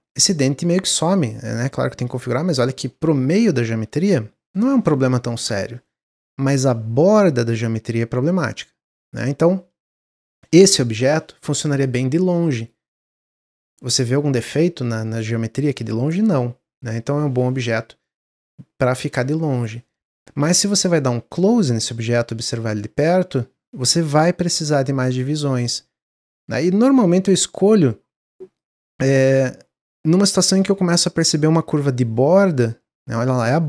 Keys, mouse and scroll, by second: 0.0 click, 1.1-2.1 drag, 2.2-5.6 middle drag, 5.7-6.1 scroll down 1, 6.1-6.7 middle drag, 6.7 scroll up 1, 6.9-8.9 middle drag, 8.9-9.2 scroll down 1, 9.4 scroll down 5, 10.6 click, 10.9-11.5 scroll down 4, 11.7 click, 11.9-12.2 scroll down 1, 12.2 middle click, 12.6 scroll up 1, 12.9-13.9 scroll down 1, 13.9-14.6 scroll up 3, 16.9 click, 19.1-20.0 scroll up 12, 20.0 ctrl+z, 20.3 ctrl+z, 21.0 ctrl+z, 21.4 ctrl+z, 21.6 ctrl+z, 22.1 ctrl+z, 22.4 ctrl+z, 22.7 ctrl+z, 23.7 ctrl+b, 26.6-28.8 drag, 28.8 middle click, 29.1-29.5 scroll up 1.